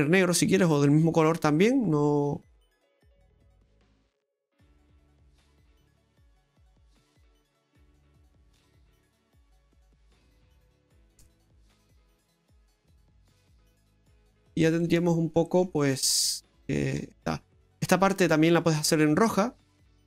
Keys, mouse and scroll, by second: 1.1-1.8 scroll down 2, 2.9 click, 5.8-7.0 scroll down 1, 7.0 middle click, 7.0-7.3 scroll down 1, 8.5 right click, 9.8 click, 10.8 click, 13.5-13.8 scroll down 2, 13.8 middle click, 14.4 right click, 14.8 middle click, 15.8-16.9 scroll up 6, 16.6 shift+middle click, 17.1 middle click, 17.8 middle click, 18.1 shift+middle click, 19.0 right click.